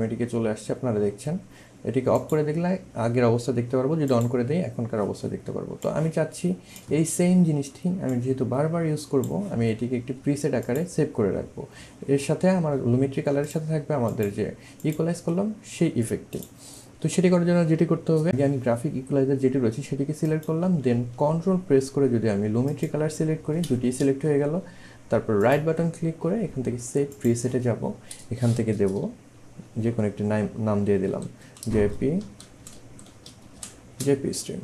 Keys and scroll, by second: 31.0-34.0 typing.